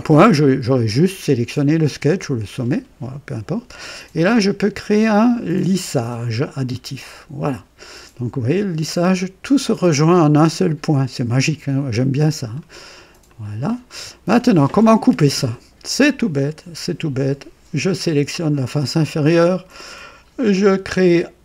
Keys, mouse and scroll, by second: 6.6 click, 8.4-12.8 drag, 13.3 click, 14.3-15.6 drag, 17.8 click.